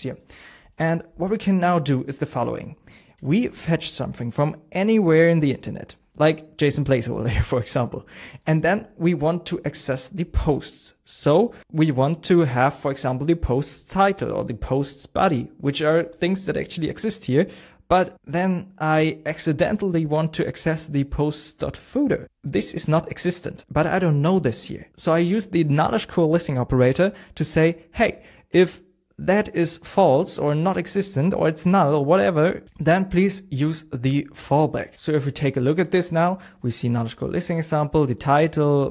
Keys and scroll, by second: 3.1 BackSpace, 3.4 super+s, 35.0 BackSpace.